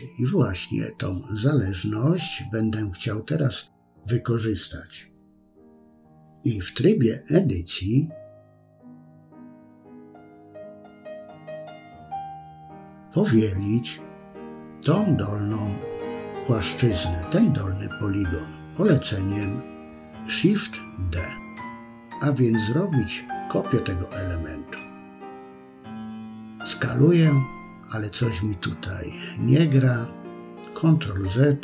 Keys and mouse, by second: 5.3 Tab, 10.5 middle click, 13.3 click, 15.1-17.1 middle drag, 21.0 shift+d, 24.2 s, 28.5 middle click, 30.2 ctrl+z.